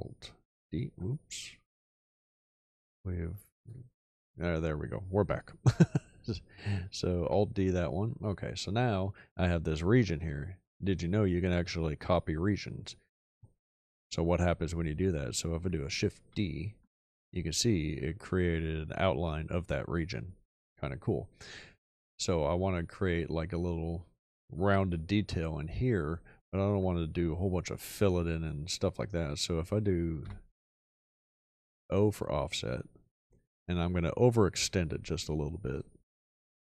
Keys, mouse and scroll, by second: 0.5 super+d, 7.2 alt+d, 16.2 shift+d, 30.2 o.